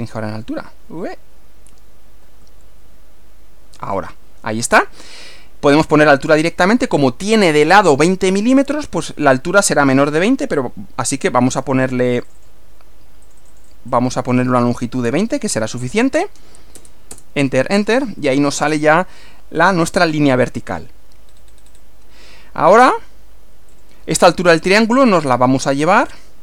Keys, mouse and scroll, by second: 2.4 z, 9.5 click, 12.2 click, 13.3 click, 14.8-15.7 typing, 16.8 Return, 17.9-18.2 scroll down 2, 18.8-19.9 middle drag, 20.1 middle click, 21.3 scroll up 2, 21.6 scroll down 2, 21.6 scroll up 2, 23.7 click, 25.1 click.